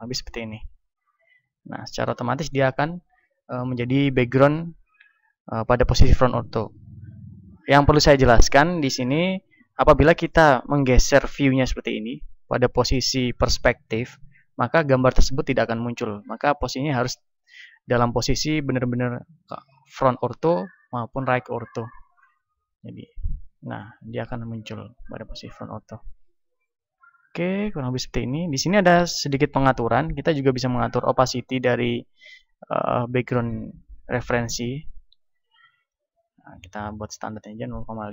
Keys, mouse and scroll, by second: 1.7-3.7 middle drag, 9.9-11.6 middle drag, 13.7-15.2 middle drag, 22.9 KP_1, 23.9-25.8 middle drag, 26.5-31.0 middle drag, 31.0-33.3 drag, 36.9 click, 37.9-38.1 drag.